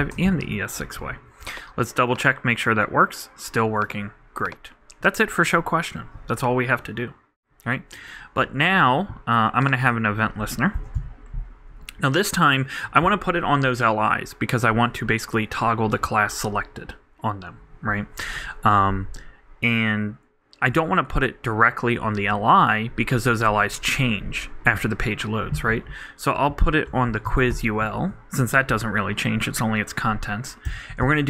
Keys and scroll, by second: 0.0 super+Left, 10.2-11.4 typing, 27.8 super+l, 28.0 super+Right, 31.1-31.2 typing.